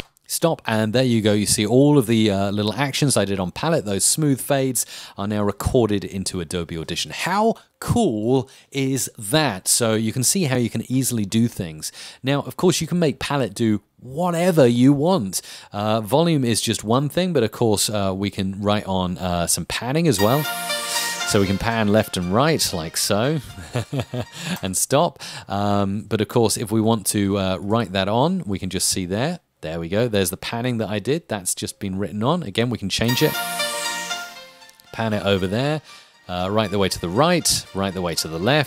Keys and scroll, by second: 25.5 space, 32.9 space.